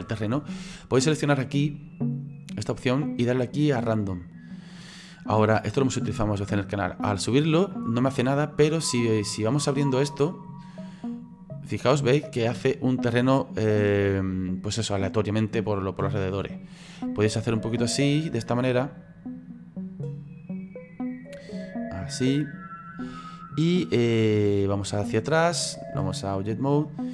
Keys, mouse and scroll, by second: 2.2 click, 3.1 click, 24.7 click.